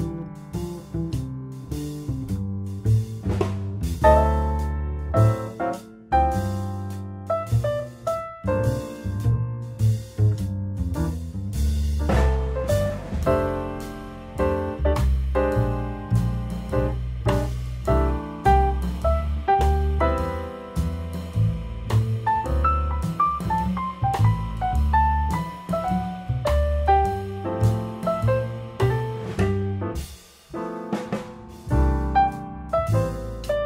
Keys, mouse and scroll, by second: 0.0 click, 1.5 click, 2.6 shift+middle click, 3.0-3.7 scroll down 12, 3.7 shift+middle click, 4.3-4.7 scroll up 6, 4.7 shift+middle click, 5.0-5.3 scroll down 1, 5.3 shift+middle click, 5.6-6.0 scroll up 4, 6.0 click, 9.8 click, 10.3 click, 15.5 click, 16.1-16.7 shift+middle drag, 16.7 click, 18.3 click, 19.5-19.9 scroll down 2, 19.9 click, 20.5 shift+click, 20.7 shift+drag, 21.4 g, 22.9 Tab, 23.1 scroll down 1, 23.2 click, 23.8 Tab, 24.1 click, 25.1-26.2 scroll down 1, 26.2 scroll down 1, 26.3 click, 27.0 click, 28.3 click.